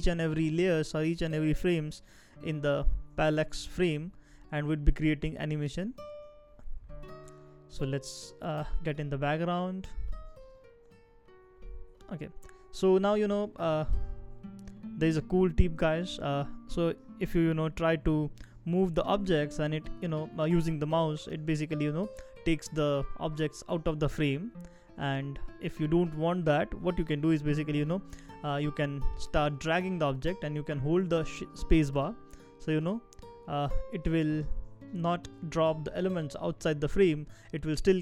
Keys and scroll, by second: 25.5 super+z, 27.5 space, 30.4 space, 30.9 space.